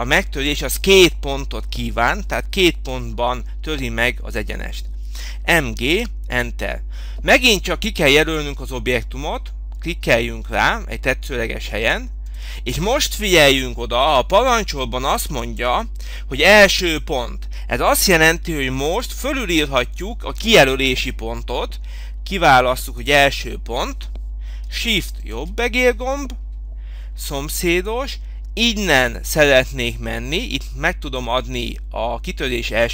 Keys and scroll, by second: 6.2 Return.